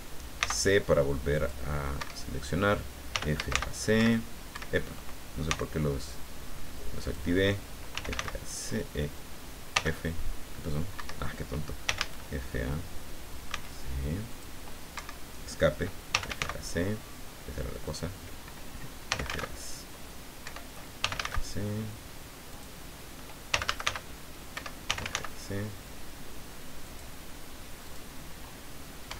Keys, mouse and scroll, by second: 0.4 c, 1.3 click, 1.9 Escape, 3.1 f, 3.3 a, 3.5 c, 3.9 Escape, 5.4 c, 7.0 click, 7.9 f, 8.1 a, 8.1 c, 9.7 f, 11.0 Escape, 11.8 f, 12.0 a, 13.5 c, 14.3 click, 14.9 Escape, 16.1 f, 16.3 a, 16.4 c, 17.8 click, 19.1 f, 19.3 a, 20.4 Escape, 21.0 f, 21.1 a, 21.2 c, 22.5 click, 23.5 f, 23.7 a, 23.8 c, 24.5 Escape, 24.8 f, 25.0 a, 25.1 c, 26.8 click, 27.8 click, 29.0 Escape.